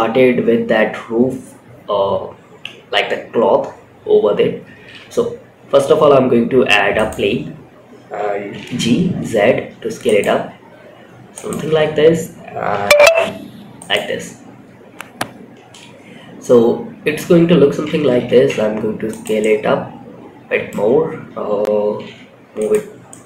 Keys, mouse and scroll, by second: 3.3-3.9 scroll up 2, 4.1 shift+a, 6.8 scroll up 2, 7.8 g, 9.6 s, 11.9 g, 15.8-16.5 middle drag, 16.7 scroll up 2, 17.6 s, 18.7-20.0 middle drag, 20.3-20.7 scroll down 1, 21.2 g, 22.2 scroll down 2, 22.3 scroll up 1, 22.4-23.1 middle drag.